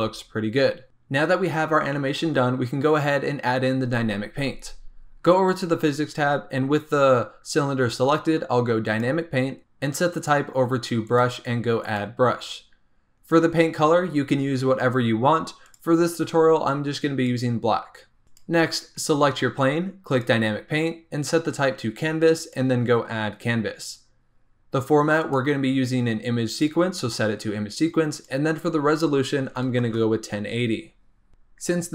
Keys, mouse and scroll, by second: 5.4 click, 8.8-12.1 drag, 15.6 click, 18.2 click, 20.1 click, 22.4 click, 23.6 scroll down 4, 25.2-31.1 drag.